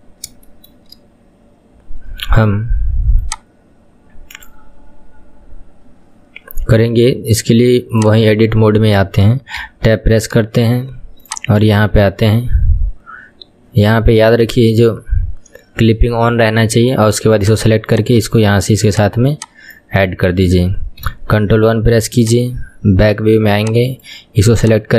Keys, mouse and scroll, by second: 0.1-0.5 scroll down 3, 0.5-3.4 shift+middle drag, 3.4-6.3 drag, 8.2 click, 8.7-9.0 scroll down 1, 9.0-9.7 shift+middle drag, 9.7 Tab, 10.2-11.4 scroll up 3, 11.4-12.9 drag, 12.9-16.7 scroll up 3, 17.5 click, 18.0 click, 19.0 click, 19.4 click, 21.1 ctrl+KP_1, 22.3 click, 22.6-23.3 scroll up 2, 23.3-23.7 scroll up 1, 23.7 click, 24.7 click.